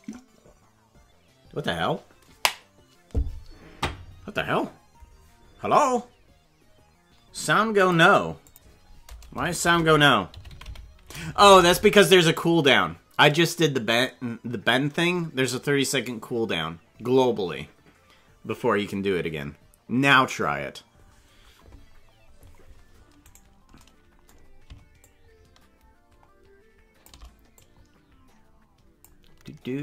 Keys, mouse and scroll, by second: 23.5 right click, 25.0-27.1 shift+drag, 27.6-29.1 drag.